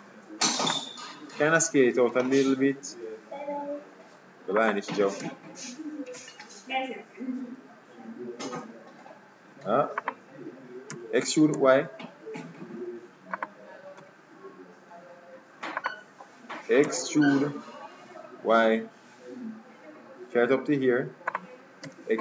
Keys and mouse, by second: 1.4 s, 5.3 e, 11.1 e, 14.1 s, 17.0 e, 21.9 e.